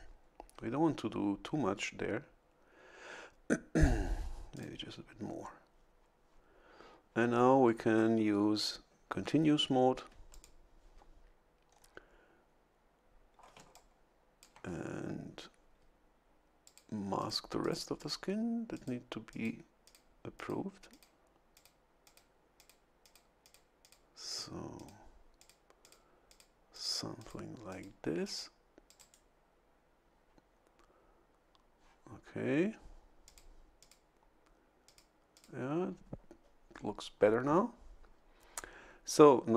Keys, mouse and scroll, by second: 4.5 click, 10.3 ctrl+click, 11.7 scroll down 2, 13.5 a, 13.7 click, 16.6 click, 17.2 click, 17.6 click, 18.0 click, 18.7 click, 19.3 click, 19.8 click, 20.3 click, 20.9 click, 21.5 click, 22.0 click, 22.6 click, 23.0 click, 23.4 click, 23.8 click, 24.3 click, 24.7 click, 25.4 click, 25.8 click, 26.3 click, 26.7 click, 27.2 click, 27.7 click, 28.2 click, 28.9 click, 33.2 click, 33.8 click, 34.8 click, 35.3 click.